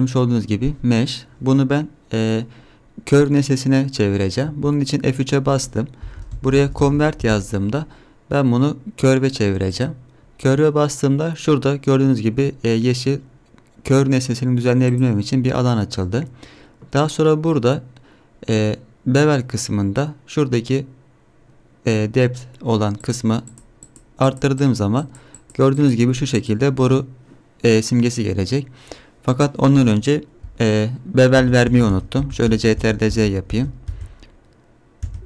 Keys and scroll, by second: 4.6 F3, 31.4 ctrl+z, 31.7 ctrl+z, 31.9 ctrl+z, 32.2 ctrl+z, 32.5 ctrl+z, 32.8 ctrl+z, 33.1 ctrl+z, 33.5 ctrl+z, 33.9 ctrl+z.